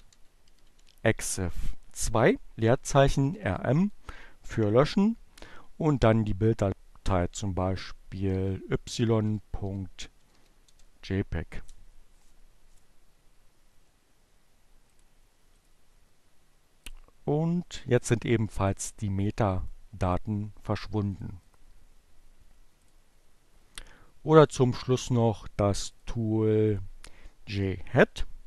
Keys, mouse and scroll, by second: 1.5-2.3 typing, 4.2 space, 6.5-7.5 typing, 9.0-9.9 typing, 13.9 click, 14.5 right click, 17.6 click, 18.4-20.4 drag, 20.4 right click, 22.0 click, 23.2 click, 24.8-25.9 drag, 27.3-28.2 typing.